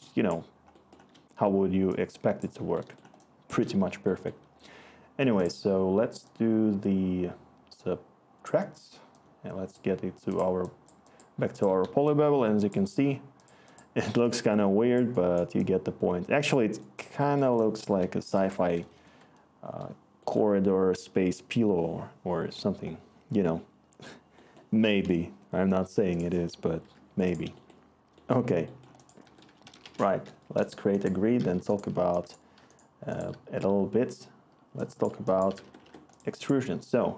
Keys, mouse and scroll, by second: 19.0 Return, 29.2-30.3 typing, 30.4 Return, 31.5 e, 32.5-33.5 typing, 35.2-36.0 typing.